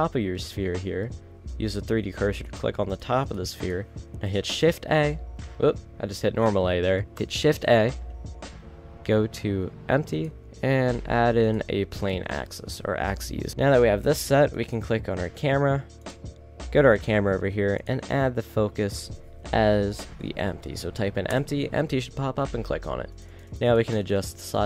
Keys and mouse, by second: 4.7 a, 5.8-7.6 middle drag, 5.9 a, 7.6 shift+a, 12.3 middle drag, 12.5 middle click, 14.9-16.4 right drag, 16.2 click, 16.4 middle click, 17.1-19.1 middle drag, 23.3 click.